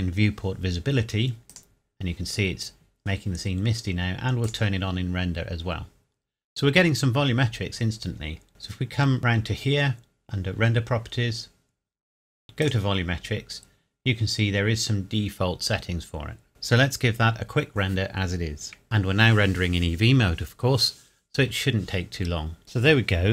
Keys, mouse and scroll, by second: 1.5 click, 1.5 click, 4.4 click, 8.5 click, 12.6 click, 22.6 click.